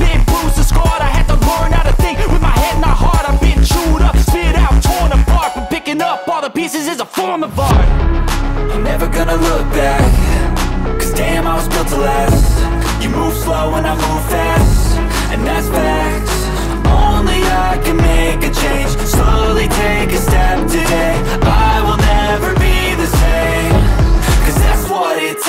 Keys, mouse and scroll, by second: 0.7 click, 1.0 s, 1.9 click, 2.7 click, 3.7 click, 5.2 click, 5.9 click, 7.3 space, 7.5 middle click, 9.1 click, 11.5 space, 25.3 space.